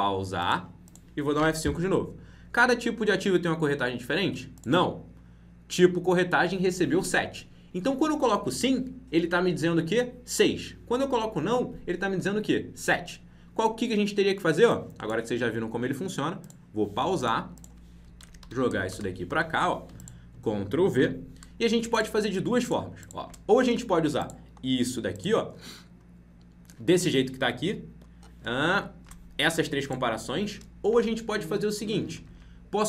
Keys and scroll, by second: 1.3 F5, 18.4 ctrl+x, 20.9 ctrl+v.